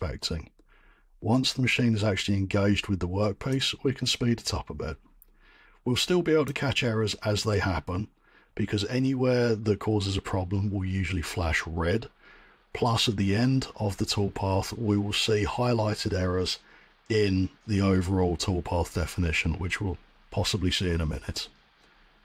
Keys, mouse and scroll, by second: 6.4-10.2 drag.